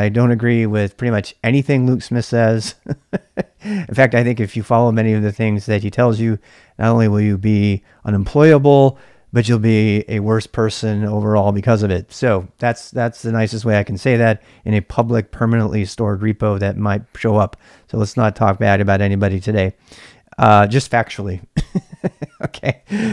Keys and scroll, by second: 22.6 ctrl+c, 22.7-23.1 typing.